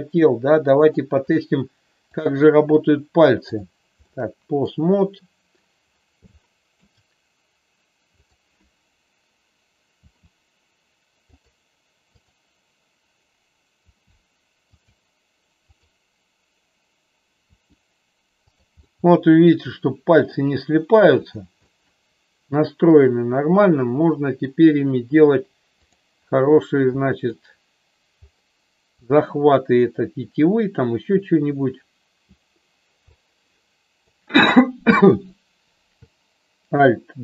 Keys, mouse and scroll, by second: 0.8 click, 2.2-3.6 drag, 4.0 shift+middle click, 6.2 shift+middle click, 8.2-9.5 drag, 11.7 r, 12.0-13.4 drag, 13.9 r, 14.9 click, 15.6-17.0 drag, 17.4 r, 18.5 click, 18.9-20.3 middle drag, 21.3 click, 21.6-24.5 middle drag, 27.0 middle click, 33.2-34.2 drag.